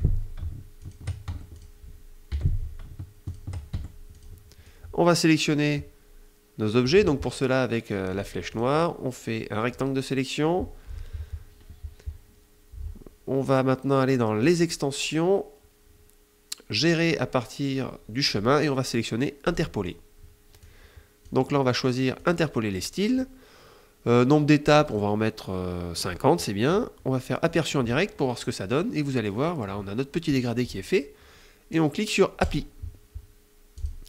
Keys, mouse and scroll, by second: 0.5 shift+click, 1.0 shift+F1, 1.3 shift+click, 1.6 shift+F1, 2.0 F7, 2.9 shift+click, 3.4 shift+F1, 3.8 shift+click, 4.3-6.7 shift+drag, 7.8 click, 8.2-9.6 drag, 14.1 click, 19.1 click, 20.3 click, 21.8 click, 22.4 click, 24.4 click, 27.1 click, 32.0 click, 33.4 click, 33.8 click.